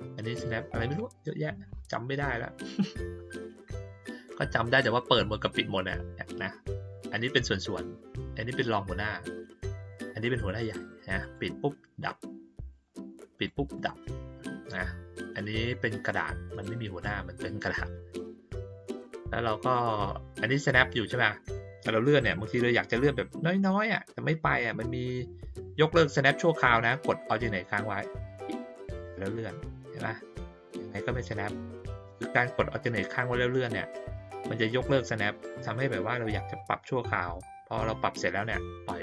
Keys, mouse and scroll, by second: 7.6 click, 9.8 click, 11.2 click, 12.7 click, 13.3 click, 13.7 click, 21.5-38.5 drag.